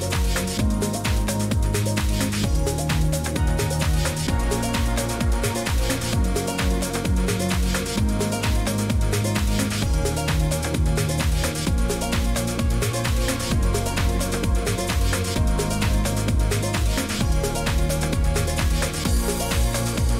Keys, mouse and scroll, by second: 0.1 click, 1.0 click, 3.4 click, 6.6 click, 12.9 click, 13.9 click, 14.8 click, 18.0 click, 18.1-19.8 typing.